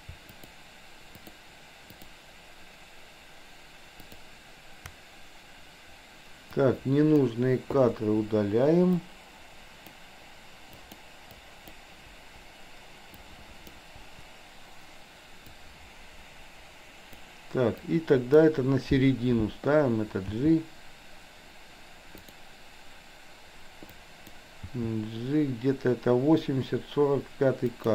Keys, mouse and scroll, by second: 0.4 shift+click, 1.2 shift+click, 1.9 shift+click, 4.0 shift+click, 6.5-7.3 drag, 7.9 Delete, 9.2-9.9 drag, 10.7 click, 11.4-11.8 drag, 12.2 Delete, 13.3-13.8 drag, 14.0 Delete, 15.7-17.3 drag, 17.8-18.4 drag, 20.2 g, 22.2 click, 23.9 click, 24.8 g.